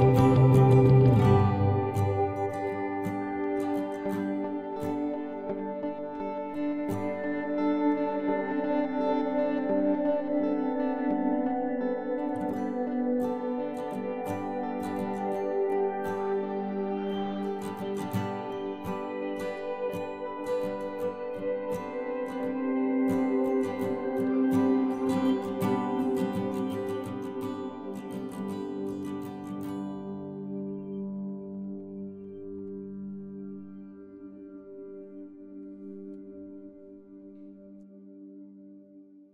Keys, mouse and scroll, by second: 0.8 click, 1.5 right click, 2.3 click, 2.3 KP_3, 2.5 Tab, 3.3 ctrl+s, 4.2 Tab, 4.4 z, 13.9 KP_Decimal, 17.0-19.4 middle drag, 19.5-23.6 middle drag, 23.6 ctrl+r, 26.2-28.5 drag, 27.1 ctrl+Tab, 29.7 click, 30.1 KP_Decimal, 30.3 right click, 31.1 middle click, 32.4-34.6 middle drag, 33.1 b, 33.6 g, 34.9 middle click, 36.2 ctrl+r, 38.4-39.3 right drag, 38.6 b, 39.0 g.